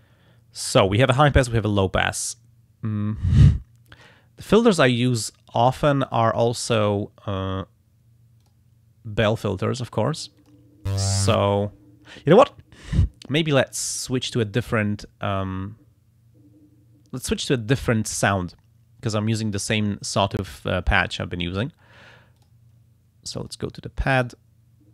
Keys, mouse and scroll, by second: 2.2-3.6 drag, 6.1 click, 8.4 click, 9.6 click, 10.4 click, 17.7 click, 19.5 click, 21.1 right click, 22.4 click, 23.4 click, 24.1 right click.